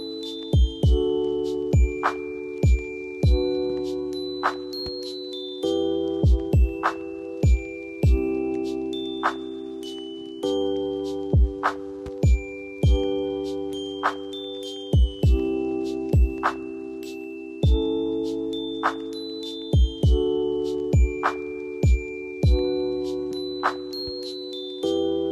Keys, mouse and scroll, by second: 4.0 ctrl+j, 8.2 ctrl+t, 12.0 ctrl+t, 14.7 alt+click, 22.1 ctrl+j.